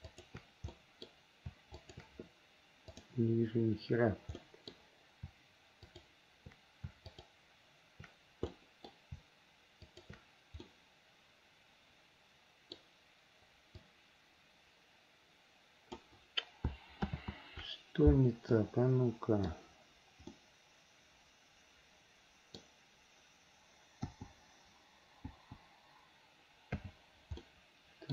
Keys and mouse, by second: 0.2 shift+click, 0.9 middle click, 1.9 shift+click, 3.2 click, 4.6 middle click, 4.8 click, 4.8 right click, 7.2 shift+click, 8.7 middle click, 10.0 shift+click, 10.8-12.9 middle drag, 14.1-16.1 drag, 17.3 ctrl+z, 18.8 click, 19.0 middle click, 19.3 click, 20.5 middle click, 20.9 click, 21.1-22.8 middle drag, 24.3 l, 25.5 l, 26.9 h, 27.6 middle click.